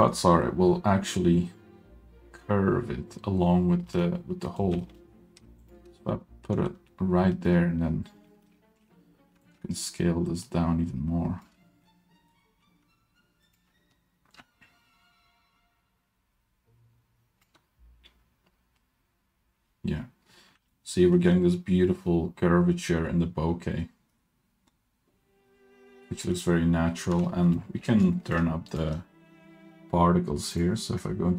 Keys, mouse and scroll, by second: 3.9 middle click, 4.5 middle click, 4.7 g, 7.0-7.5 middle drag, 8.3 middle click, 8.3-9.4 scroll up 5, 9.4-11.6 shift+drag, 12.0 middle click, 12.7 s, 14.4 click, 20.1-20.5 scroll down 2, 20.7 ctrl+middle click, 27.2-27.8 scroll down 3, 27.5 middle click, 28.1 shift+middle click, 28.7 click, 30.5 click.